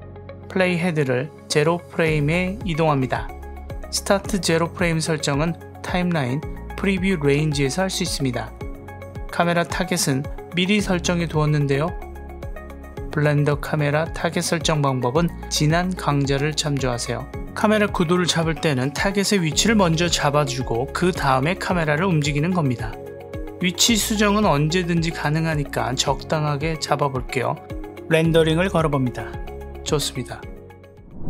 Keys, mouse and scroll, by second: 15.8 g, 22.4-25.8 drag, 28.4 F12.